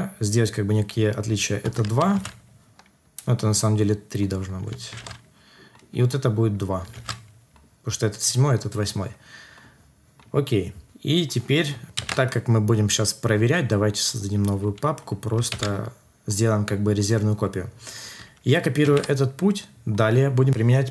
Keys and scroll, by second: 2.1 ctrl+s, 4.9 ctrl+s, 6.9 ctrl+s, 11.9 ctrl+c, 15.5 ctrl+v, 18.8 ctrl+c.